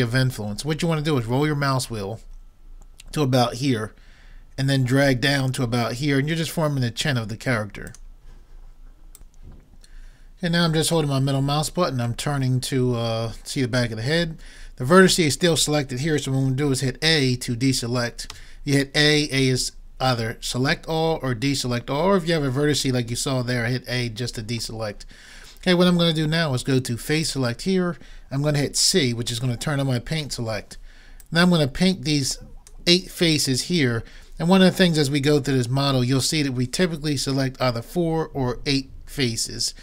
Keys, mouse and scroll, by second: 12.3-13.9 middle drag, 18.3 a, 27.3-29.0 drag, 30.3 c.